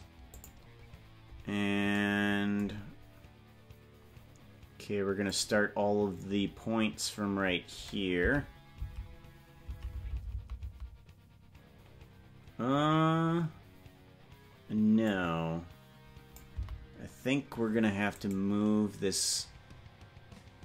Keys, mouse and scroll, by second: 5.5 click, 8.4 Left, 9.0 Left, 10.0 Right, 10.2 Right, 10.4 Right, 10.6 Right, 10.8 Right, 15.3-16.6 drag, 17.1 Right, 18.5 right click.